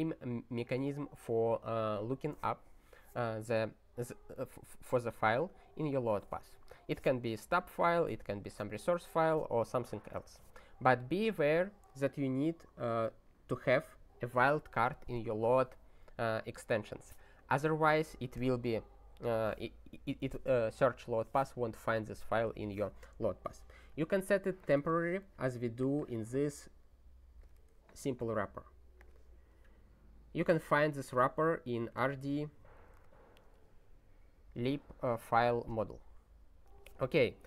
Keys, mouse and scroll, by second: 13.0 click, 13.8 click, 24.7 ctrl+g, 25.8 click, 27.4 click, 28.0 ctrl+g, 29.0 click, 34.5 click.